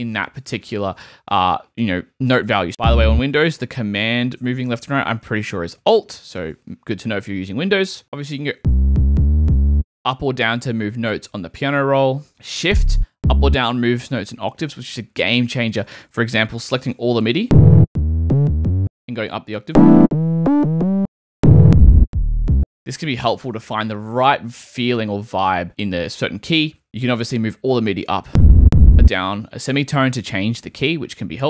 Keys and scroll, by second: 3.9 super+Right, 8.5 Down, 8.8 Up, 9.4 Down, 12.6 shift+Down, 16.4 super+a, 17.1 shift+super+a, 17.4 shift+super+Up, 17.8-20.7 typing, 19.6 shift+Up, 21.3 shift+Down, 22.0 shift+space, 28.2 Up, 28.6 Down.